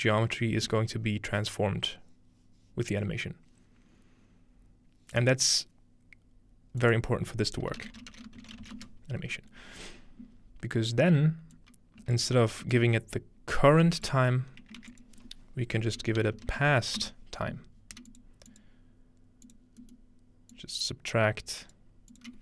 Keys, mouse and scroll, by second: 6.8 click, 7.8-9.3 typing, 11.1 scroll up 2, 11.6 click, 12.2 ctrl+space, 12.4 scroll down 2, 14.4 scroll up 2, 14.8 shift+a, 14.9 shift+click, 16.2-17.1 typing, 18.1 click, 18.5 click, 19.5 click, 20.5-22.2 drag.